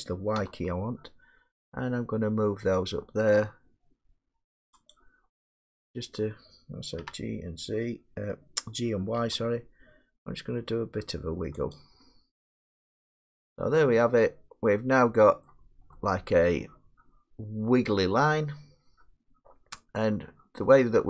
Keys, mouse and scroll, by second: 0.4 y, 4.9-10.1 drag, 7.0 g, 9.2 y, 11.8 click, 13.2-14.3 middle click, 13.6-14.0 scroll, 15.4 middle click, 15.6 middle click, 15.7 middle click, 17.5 scroll, 19.3 scroll up 4, 20.0 middle click, 20.2 scroll down 4.